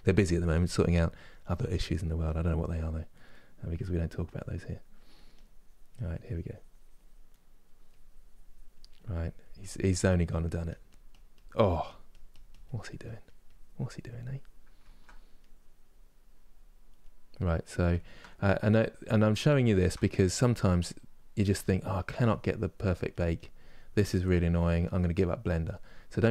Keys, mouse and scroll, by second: 2.8 middle click, 3.5-7.0 drag, 7.0 middle click, 7.6-14.5 drag, 14.5 ctrl+middle click, 15.1-16.7 drag, 16.7-18.1 middle drag, 18.1-19.3 drag, 19.3 shift+middle click, 19.8 click, 20.6-21.6 middle drag, 21.6-24.2 drag, 24.2 middle click, 24.8-26.3 drag.